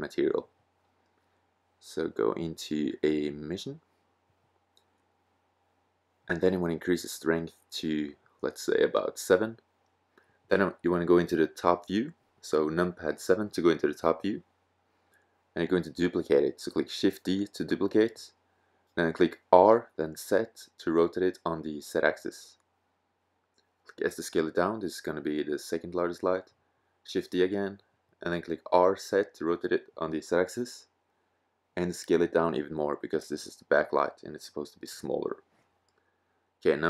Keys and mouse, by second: 10.9 s, 11.8 click, 12.3 g, 14.5 KP_7, 14.7 middle click, 16.8 shift+d, 19.3 r, 23.1 s, 24.6-25.3 drag, 25.3 shift+d, 28.0 r, 30.4-30.9 drag, 30.9 s, 34.1 click, 35.3 KP_0.